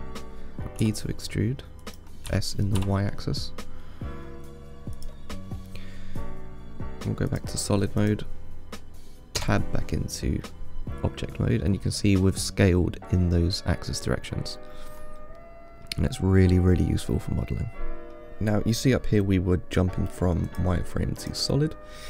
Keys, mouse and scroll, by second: 5.9-7.5 middle drag, 7.5 click, 8.2 click, 9.6 Tab, 10.7-15.1 middle drag, 15.1 scroll down 4, 15.4-16.1 middle drag, 16.1-17.7 scroll up 3, 17.7-18.3 middle drag, 18.3-20.7 scroll up 1, 20.7 click, 21.4 click.